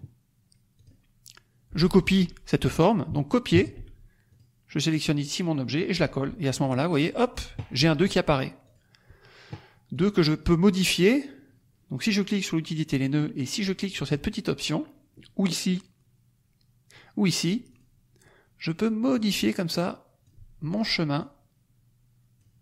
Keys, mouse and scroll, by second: 0.7 click, 3.5 ctrl+c, 4.2 click, 6.5 click, 7.0 middle click, 8.6 click, 9.8 click, 17.6 click, 19.1 click, 21.1 click.